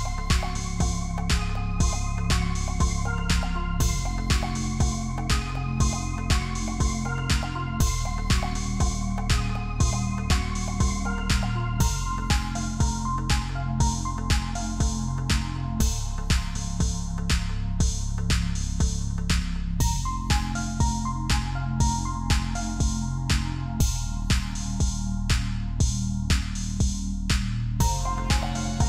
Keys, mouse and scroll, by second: 0.0 double click, 5.0 double click, 8.2 Down, 8.3 Down, 8.6 Down, 9.1 Return, 13.6 double click, 17.9 typing, 19.3-22.5 typing.